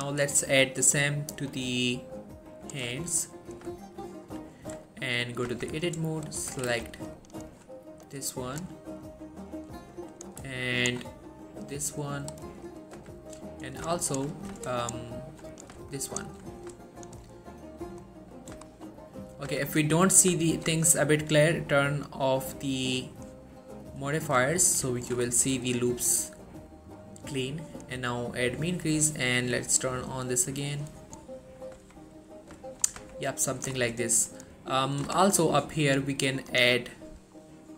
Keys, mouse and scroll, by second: 0.1 click, 3.2 shift+middle click, 3.4-3.8 scroll up 1, 4.0 shift+middle click, 5.0 shift+middle click, 5.2-5.6 shift+scroll up 2, 5.6 Tab, 6.4 click, 7.1 alt+shift+click, 8.2-8.8 click, 9.2-9.8 middle click, 10.4 click, 10.7 alt+shift+click, 12.2 click, 13.1 z, 13.9 click, 14.2 alt+shift+click, 14.9 alt+shift+click, 16.0 alt+shift+click, 17.5 middle click, 17.9 scroll up 1, 18.4 middle click, 18.8 shift+middle click, 19.0 scroll up 1, 19.3 middle click, 19.6 z, 19.8 scroll down 1, 20.0 middle click, 20.6 ctrl+z, 22.2 click, 23.6-24.2 middle click, 24.2 scroll up 1, 25.1 alt+shift+click, 25.4-26.0 middle click, 28.6-29.2 drag, 31.4 scroll down 1, 31.5 middle click, 31.9 Tab, 32.3-33.1 middle click, 32.9 scroll up 1, 33.1 Tab, 33.4 middle click, 33.9 shift+scroll up 1, 34.4 middle click, 34.7 scroll up 1, 35.2 middle click, 35.3 shift+middle click, 36.6 click, 37.5 middle click.